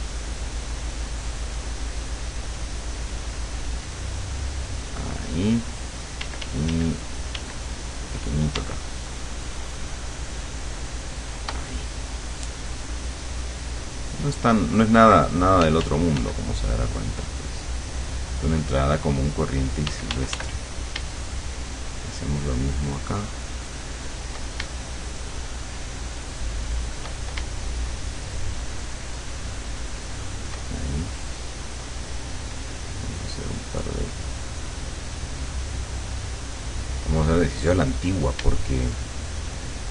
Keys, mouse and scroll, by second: 0.0 click, 0.7-1.8 drag, 3.1-4.9 drag, 6.3 d, 7.3 d, 8.9-11.6 shift+drag, 15.7 f, 16.5 click, 17.0 click, 19.9 d, 21.4-24.4 shift+drag, 25.1-27.2 shift+drag, 28.2-30.7 shift+drag, 31.7-33.9 drag, 34.3-36.5 drag, 38.7-39.9 shift+drag.